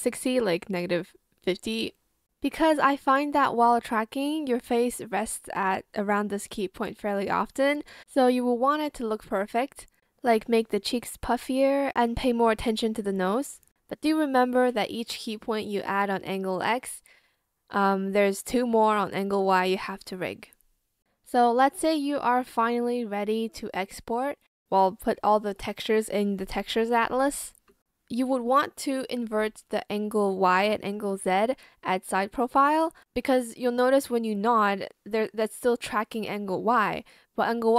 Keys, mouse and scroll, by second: 0.0 shift+click, 0.1 shift+click, 0.2 shift+click, 0.4 shift+click, 1.1 ctrl+z, 1.7 shift+click, 2.0 ctrl+z, 3.4 shift+click, 3.7 ctrl+z, 3.8 ctrl+z, 6.6 shift+click, 7.0 shift+click, 7.4 shift+Return, 9.9 shift+click, 10.0 shift+click, 10.0 shift+click, 10.8 shift+click, 11.0 shift+Escape, 12.5 shift+click, 13.3 shift+Escape, 14.1 ctrl+z, 14.5 Return, 15.2 shift+click, 16.8 shift+click, 17.1 Escape, 17.5 ctrl+z, 17.7 shift+click, 18.0 shift+b, 19.3 Return, 22.2 Return.